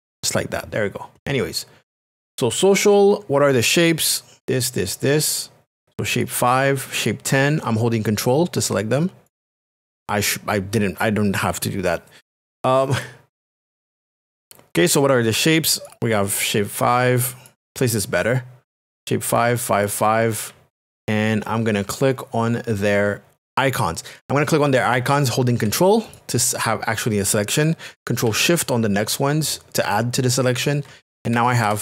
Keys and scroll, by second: 31.6 ctrl+KP_Add.